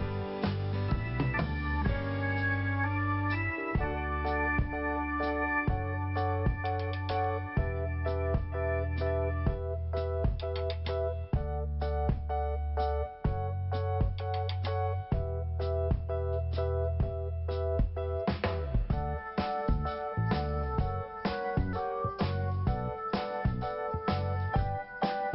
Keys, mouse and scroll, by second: 0.4-1.1 scroll down 1, 1.1 scroll up 1, 2.4 click, 2.4 click, 5.3 click, 7.8 scroll down 1, 8.4-8.7 scroll up 1, 10.1 scroll down 1, 11.1 click, 12.2 scroll down 1, 12.9 scroll up 1, 14.6 click, 18.2 click, 19.9 click, 24.5-24.8 scroll down 1.